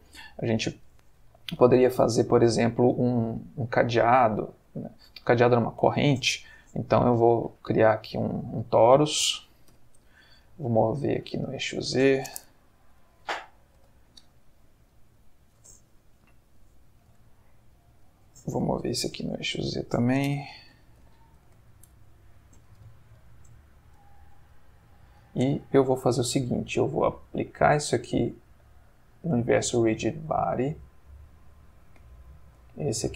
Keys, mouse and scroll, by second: 0.0 Escape, 1.1-2.4 middle drag, 3.2 x, 3.5 click, 4.1 click, 4.9 x, 5.1 click, 5.6-6.2 shift+middle drag, 6.5 shift+a, 8.2 click, 9.7 g, 10.0 z, 11.3 click, 11.7 middle click, 12.4 r, 12.9 x, 13.3 0, 13.8 Return, 14.9 middle click, 17.0 shift+d, 18.9 z, 19.8 click, 20.4 r, 20.7 z, 21.0 9, 21.4 Return, 22.8 g, 23.2 z, 24.0 click, 24.5 shift+click, 25.2 shift+click, 28.6 click, 32.2 click.